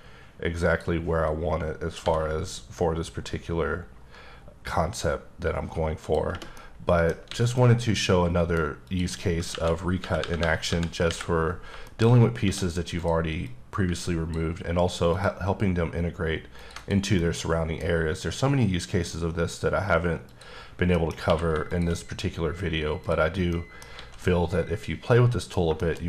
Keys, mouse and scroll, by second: 1.7 b, 2.5-3.8 scroll down 9, 4.5 scroll down 2, 5.7 click, 6.2 middle click, 7.0 alt+a, 7.2 middle click, 8.5 click, 9.2-10.7 typing, 11.5 shift+middle click, 11.7 shift+scroll up 3, 12.1 d, 12.6 click, 13.1 click, 14.8 ctrl+click, 16.2 double click, 16.4 ctrl+click, 17.2 middle click, 17.5-19.9 scroll up 2, 19.9 click, 20.3 scroll down 2, 20.6 middle click, 21.2 shift+q, 21.4 shift+click, 21.8-22.7 scroll down 3, 22.7 click, 22.9-23.6 scroll down 3, 23.2 middle click, 23.6 alt+a, 23.9-25.4 middle drag.